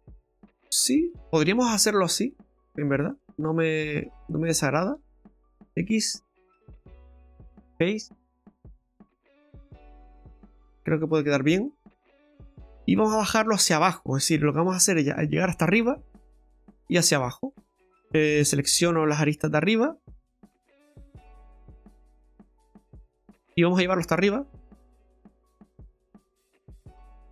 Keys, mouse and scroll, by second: 2.4 click, 3.1 right click, 3.7 middle click, 4.6 shift+right click, 5.6 x, 8.3 middle click, 12.5-13.5 scroll down 3, 13.5 middle click, 14.7 shift+middle click, 15.0 shift+scroll up 1, 17.3 click, 18.5 right click, 19.0 right click, 19.6 shift+right click, 21.0-21.3 scroll up 3, 21.4 shift+middle click, 21.8 scroll up 3, 22.7 right click, 23.3 shift+right click, 23.6 scroll down 4, 25.1 click, 26.6 shift+middle click.